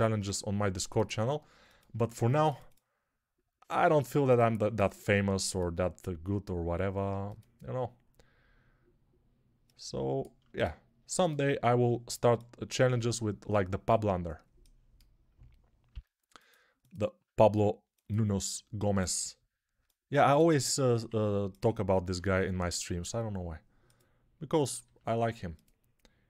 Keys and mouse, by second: 2.2 ctrl+r, 3.8 ctrl+z, 5.2 ctrl+r, 10.3-16.8 shift+drag, 15.8 g, 16.8-26.2 ctrl+middle drag, 17.3 ctrl+r, 20.9 1, 22.0 g, 24.7 g.